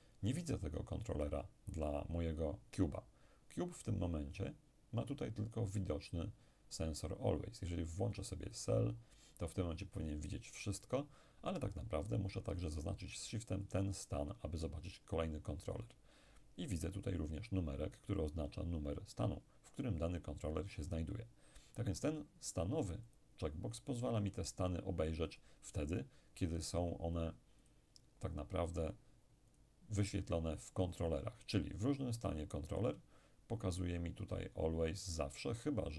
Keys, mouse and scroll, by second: 8.5 click, 13.7 shift+click, 23.1 click, 25.3 click, 27.7 click, 29.6 click, 32.2 click.